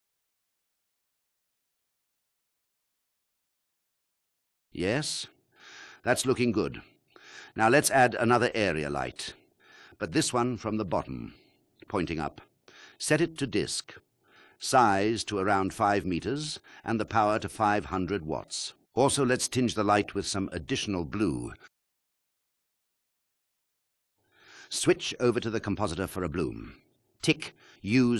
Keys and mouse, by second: 0.6-2.8 drag, 10.9 ctrl+alt+click, 11.5 shift+a, 12.9 KP_3, 14.3-16.5 typing, 16.5 Return, 17.1-17.7 drag, 17.9 click, 19.5 click, 20.2 KP_0, 23.7 KP_1, 25.9-26.5 drag.